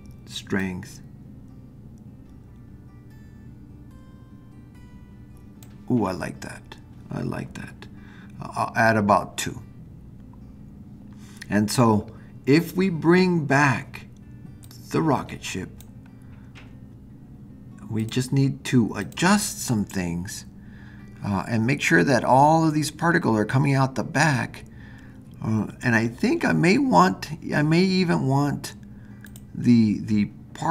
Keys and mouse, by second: 0.6-5.7 drag, 14.7-15.9 drag, 18.0 click, 19.0 click, 29.2 click.